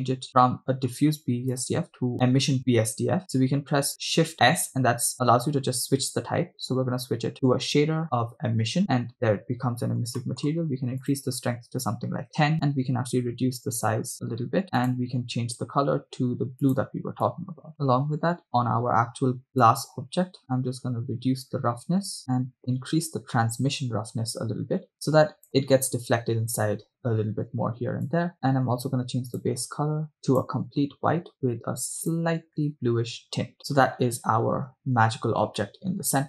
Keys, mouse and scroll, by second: 0.5 right click, 0.5 scroll down 3, 0.5 middle click, 2.0 click, 4.4 shift+s, 9.3-10.2 scroll up 6, 10.2 middle click, 11.6 click, 13.4 s, 14.8 click, 18.8 middle click, 18.8-19.4 scroll down 2, 19.8-25.5 drag, 22.2 middle click, 22.2-22.6 scroll up 3, 28.1 click, 28.3 middle click, 28.3 scroll down 7, 28.4-29.3 scroll up 1, 29.3 scroll up 1, 29.4 click, 33.6-34.6 scroll down 7, 35.8-36.2 middle drag.